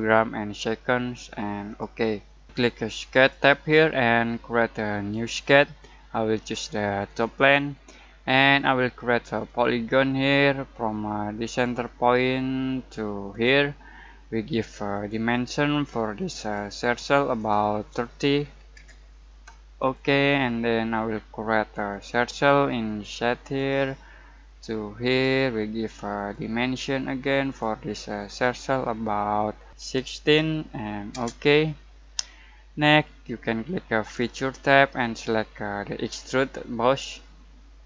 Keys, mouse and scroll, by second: 1.6 click, 3.1 click, 9.4 click, 19.7 click, 29.7-30.2 typing, 31.1 Return, 34.1 click, 36.8 click.